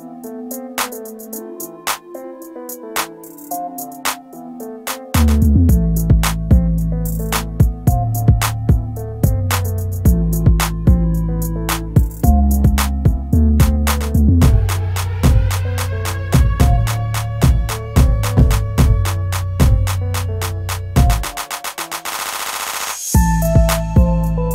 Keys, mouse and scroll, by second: 6.6 typing, 22.3 shift+F4.